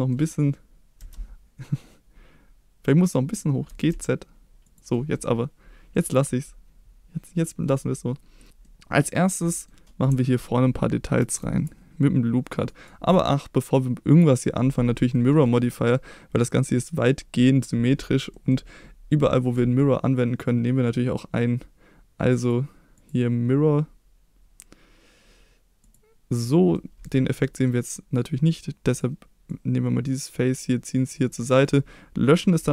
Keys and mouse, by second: 0.9 a, 3.6 g, 3.9 z, 4.6 click, 4.9 middle click, 5.9 middle click, 8.6 middle click, 9.4 middle click, 15.1 middle click, 18.3 middle click, 22.4 click, 23.0-25.9 drag, 26.7-27.0 middle drag, 27.4 middle click, 28.9 click, 29.4-31.3 drag, 31.6 click, 32.6 x.